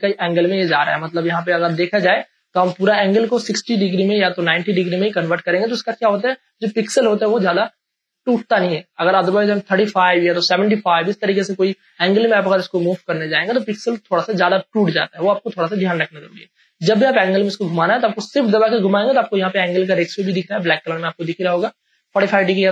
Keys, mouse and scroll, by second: 1.3 space, 1.6-11.6 ctrl+drag, 16.9-22.7 shift+drag.